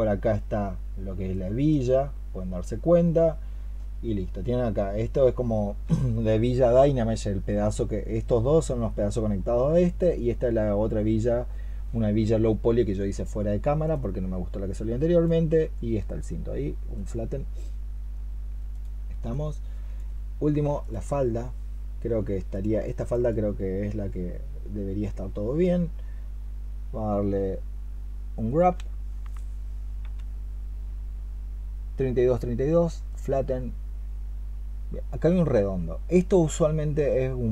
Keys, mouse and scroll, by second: 20.7 alt+click, 22.7 alt+click.